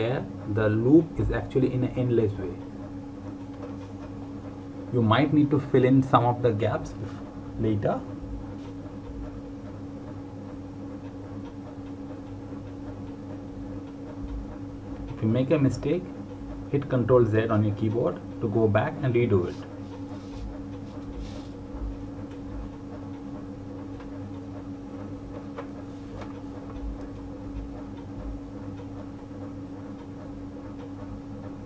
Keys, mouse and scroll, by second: 14.3 click, 22.1 click.